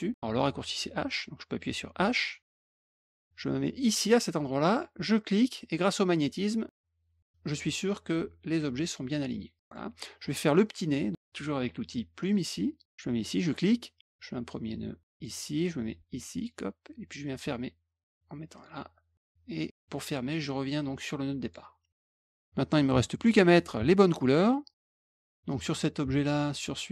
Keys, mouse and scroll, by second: 2.5 h, 5.1-8.8 drag, 9.5 click, 9.6 middle click, 12.1 click, 13.4 click, 15.1 click, 16.3 click, 18.5 click, 21.4 click, 22.3 click, 24.4 middle click, 25.4 click, 26.5 shift+click.